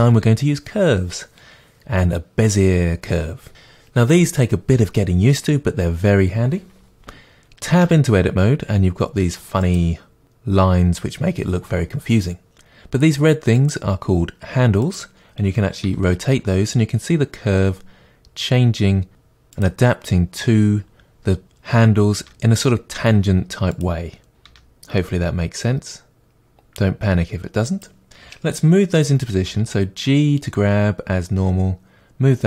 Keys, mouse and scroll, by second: 7.8 Tab, 9.6 click, 13.6 click, 14.8 click, 15.8 r, 19.6 click, 22.2 r, 23.8 click, 24.4 r, 27.8 click, 29.4 g, 31.6 middle click.